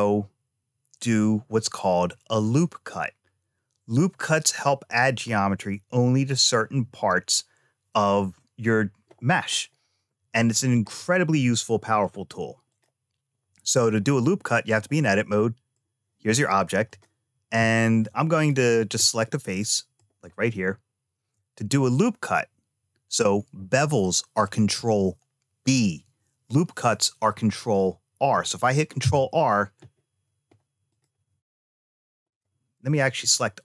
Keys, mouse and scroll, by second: 9.4-9.7 scroll up 2, 10.1-10.8 scroll down 1, 10.8-11.9 middle drag, 12.5 click, 15.2 middle click, 16.7 click, 18.2 click, 18.6 click, 19.2 middle click, 28.8 ctrl+r, 32.1 click, 33.0 a.